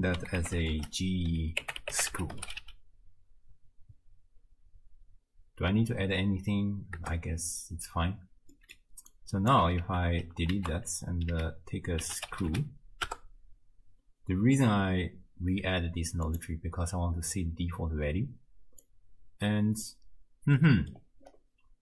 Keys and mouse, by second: 0.6 click, 0.6-7.1 shift+middle drag, 8.6 click, 9.4 middle click, 9.9 ctrl+x, 10.6 ctrl+a, 19.0 click, 20.7 click.